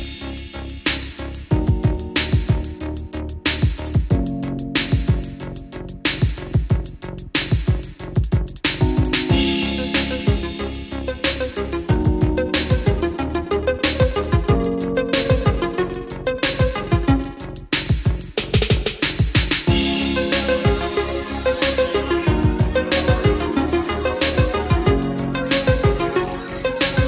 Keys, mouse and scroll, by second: 8.4 KP_2, 10.1-15.4 drag, 18.4 click, 21.3-25.0 drag, 25.0 Delete, 25.7-27.0 drag.